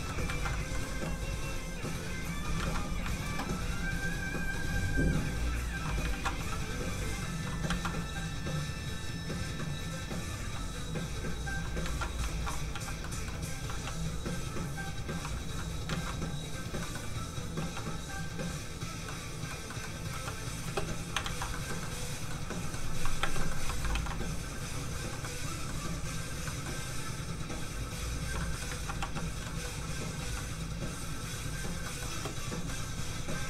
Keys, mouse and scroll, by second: 0.4 ctrl+z, 0.5 middle click, 0.9 ctrl+f, 1.1 click, 2.6 ctrl+z, 3.7 click, 6.1 ctrl+z, 6.6 click, 6.6 f, 7.7 ctrl+z, 9.0 click, 9.6 click, 10.4 f, 10.5 click, 11.8 ctrl+z, 12.3 alt+shift+z, 12.8 z, 13.0 middle click, 13.8 f, 13.9 click, 15.9 ctrl+z, 16.5 z, 16.8 middle click, 17.6 f, 17.8 click, 19.1 middle click, 20.1 z, 20.6 space, 21.2 alt+shift+z, 21.5 shift+middle click, 21.6 middle click, 23.2 space, 23.4 middle click, 23.9 ctrl+s, 24.5 s, 24.6 click, 25.2 middle click, 25.7 scroll up 1, 26.4 middle click, 26.7 scroll up 1, 27.6 click, 28.4 middle click, 29.0 z, 29.1 f, 29.2 click, 29.4 middle click, 30.2 f, 31.8 middle click, 32.1 space, 32.4 scroll down 1.